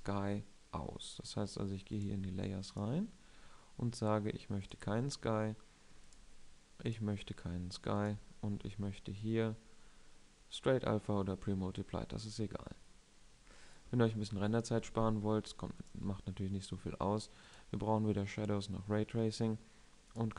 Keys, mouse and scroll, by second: 20.0-20.3 drag.